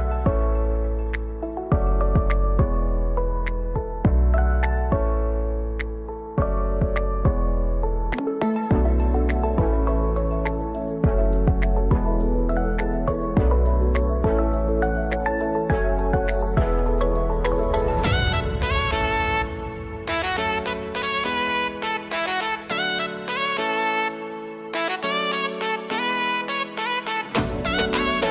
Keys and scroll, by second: 18.1 ctrl+space.